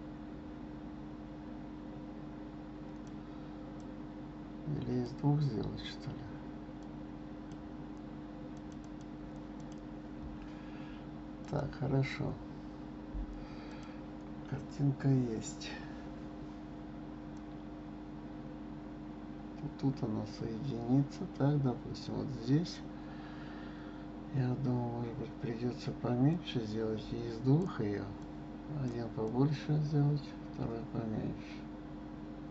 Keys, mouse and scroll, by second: 3.8 click, 6.8 click, 8.5 click, 8.8 click, 9.6 click, 11.4 click, 13.7 click, 14.6-15.5 scroll up 5, 16.3-17.3 scroll down 3, 17.3 click, 26.3 click, 28.2 click, 29.2 click.